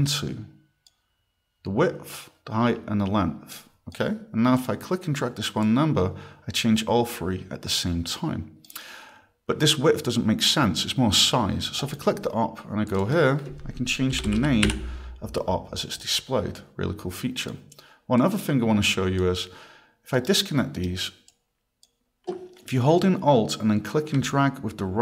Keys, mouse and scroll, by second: 3.5 click, 4.6 click, 5.6 click, 11.8 click, 12.9 click, 13.0 click, 14.1-15.2 typing, 16.0 click, 16.6 click, 18.2 click, 20.2 right click, 20.8 right click, 21.3 click, 24.3 right click.